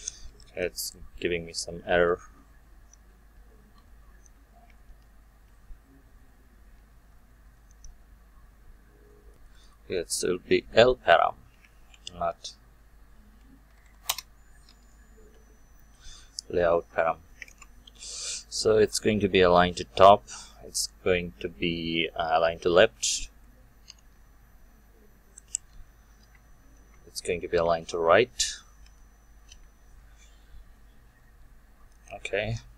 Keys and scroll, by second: 3.7 Delete, 14.1 Return, 17.5 ctrl+space, 19.5 Return, 26.2 Return.